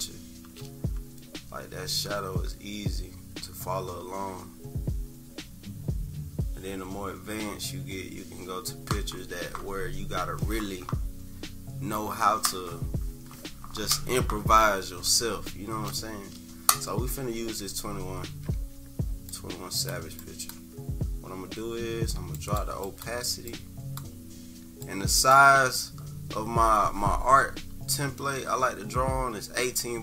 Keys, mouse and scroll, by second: 17.3 -, 17.6 -, 17.9 -, 18.6 =, 19.3 click, 20.2 click, 22.4 click, 22.8 click, 23.5-23.9 drag, 24.8 click.